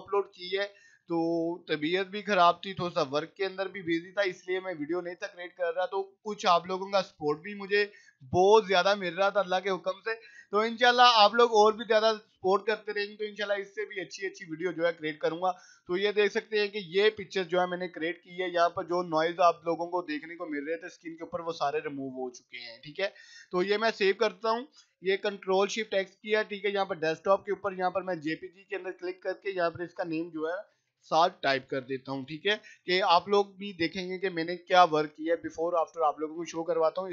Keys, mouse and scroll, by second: 15.9 click, 17.7 right click, 18.4 click, 22.1 click, 23.4 right click, 23.7 click, 24.9 ctrl+shift+s, 27.8 click, 28.7 click, 30.4-31.6 typing, 32.8 click.